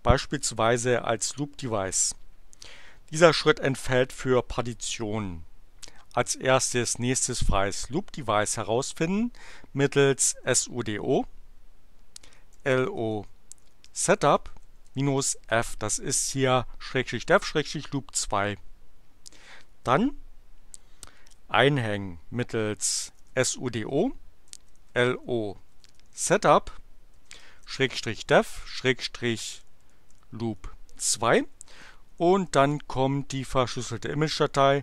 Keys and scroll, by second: 9.7-10.9 typing, 12.2-15.1 typing, 22.6-34.8 typing.